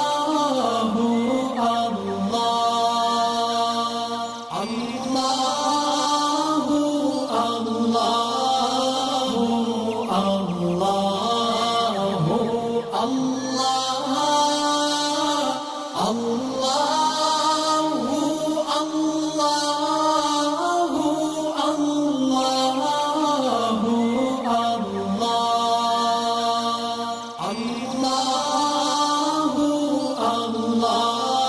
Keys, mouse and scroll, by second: 1.6-2.9 drag, 5.3-7.1 drag, 11.8 ctrl+shift+], 12.8 click, 13.3 alt+scroll up 1, 14.2-14.5 click, 18.1 click, 22.1-23.2 drag, 24.2-24.7 alt+click, 25.0 alt+scroll down 1, 25.3 click, 26.3-31.4 drag.